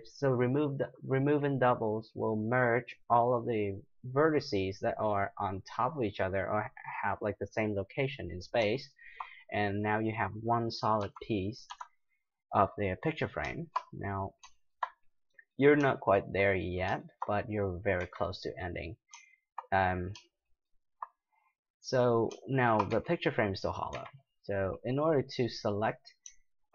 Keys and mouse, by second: 8.9-10.6 middle drag, 11.0 g, 11.6-12.6 drag, 12.6 middle click, 18.0 z, 19.8-22.7 middle drag, 22.9 z, 23.9 z, 25.7-26.7 right drag.